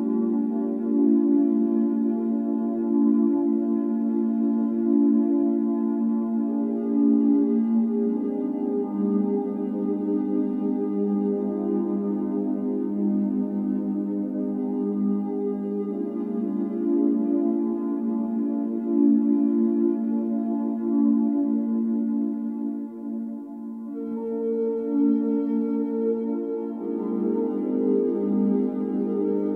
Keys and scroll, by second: 4.9 x, 8.8 m, 11.1-14.0 typing, 15.7-16.4 typing, 18.1-19.4 typing, 20.1 Return, 24.3 m, 28.5 Escape.